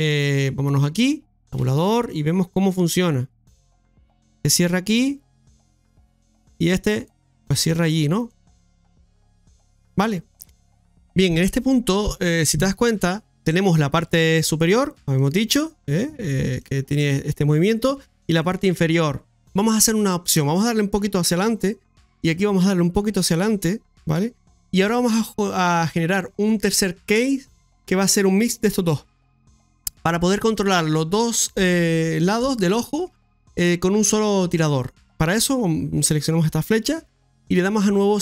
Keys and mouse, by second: 1.6 Tab, 3.4-6.0 drag, 7.0 click, 8.4-10.0 drag, 10.6 middle click, 14.3 click, 15.2 click, 16.7-17.7 drag, 18.3 click, 19.3 click, 20.3-21.6 drag, 22.3 click, 23.4 click, 36.1-38.2 drag.